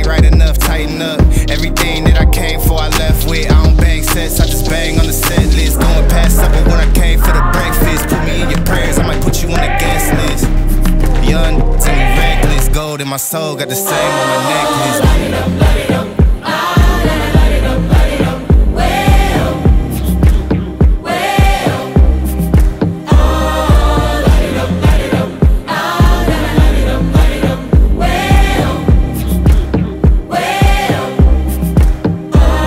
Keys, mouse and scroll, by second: 6.6-9.2 drag, 20.5 click.